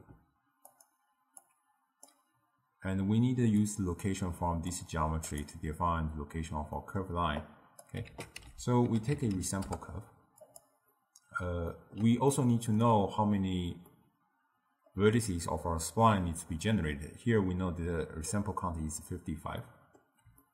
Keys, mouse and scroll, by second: 1.5 drag, 3.8 click, 6.8-7.5 middle drag, 7.5 click, 8.1 ctrl+a, 11.0-17.0 middle drag, 19.7-20.5 middle drag.